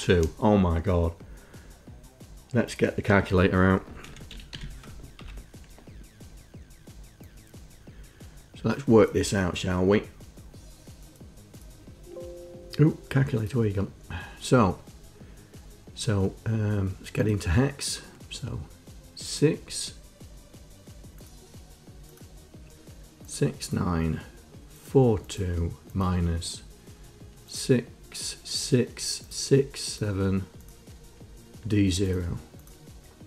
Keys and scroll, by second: 4.2-5.4 typing, 5.6 Return.